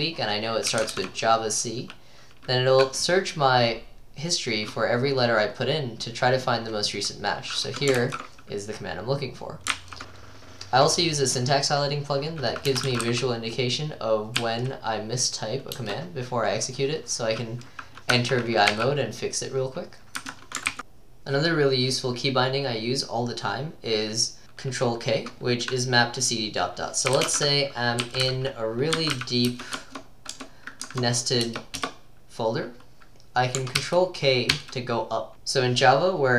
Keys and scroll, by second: 0.5-1.4 typing, 8.0 ctrl+e, 9.7 ctrl+c, 10.0 BackSpace, 12.5-14.4 typing, 15.8 typing, 18.2 Escape, 18.7-20.4 typing, 20.7 ctrl+c, 26.9-30.0 typing, 30.4 Tab, 30.9 Tab, 31.5 Return, 31.8 Return, 33.8 ctrl+k, 34.6 ctrl+k.